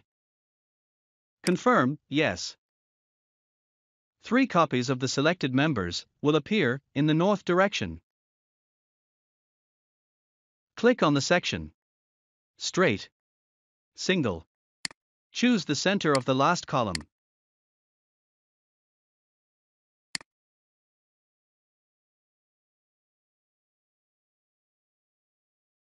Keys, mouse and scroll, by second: 1.3 click, 3.0 click, 4.2-4.9 scroll down 1, 6.5 click, 7.7-8.5 scroll up 1, 14.8 click, 17.5-17.8 scroll up 2, 20.0 click, 21.9 scroll down 1.